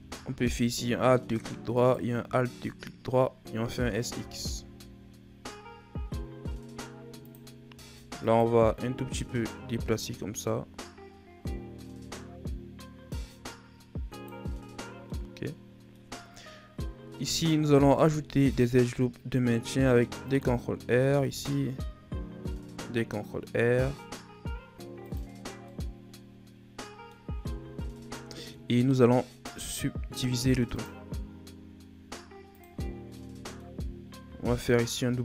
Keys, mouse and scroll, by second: 1.6 alt+shift+right click, 3.5 s, 8.2 alt+right click, 9.3 click, 14.5-15.0 scroll down 2, 15.0-16.0 middle drag, 16.0-17.5 scroll up 1, 17.5 ctrl+r, 20.9 ctrl+r, 25.5-27.2 middle drag, 27.2 Tab, 27.7 shift+scroll down 1, 27.9-29.4 middle drag, 29.4 click, 32.4 click, 33.0-34.2 middle drag, 34.2 w.